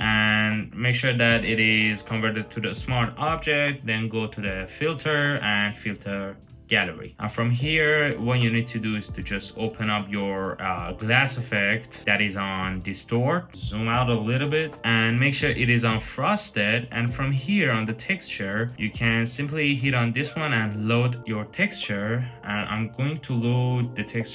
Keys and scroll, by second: 13.5 super+-, 13.7 super+-.